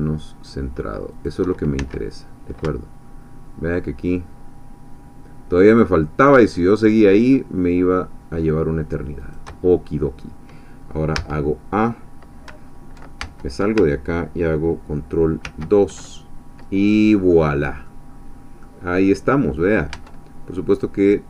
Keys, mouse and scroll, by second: 1.1 shift+click, 1.8 shift+s, 9.2 shift+click, 11.2 a, 13.2 ctrl+Tab, 15.6 ctrl+2, 16.8-17.3 scroll down 2, 17.3 middle click, 18.6-19.9 middle drag, 20.0 Tab, 20.7 click.